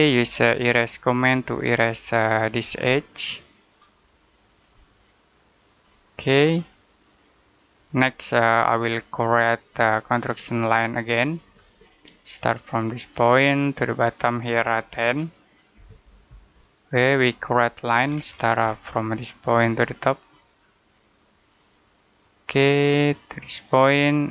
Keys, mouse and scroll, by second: 0.7 click, 2.7 middle click, 4.3 click, 5.8 middle click, 7.0 click, 7.9 middle click, 11.4 click, 14.9-15.6 typing, 16.1 Return, 17.3 click, 17.8 scroll down 1, 18.1-18.8 scroll up 1, 19.3 click.